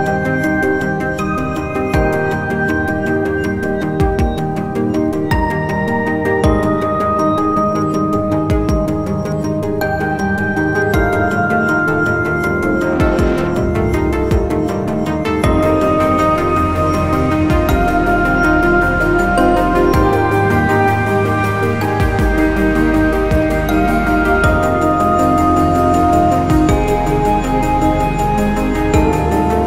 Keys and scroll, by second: 7.6 `, 15.4 `, 19.6 `, 20.5 `.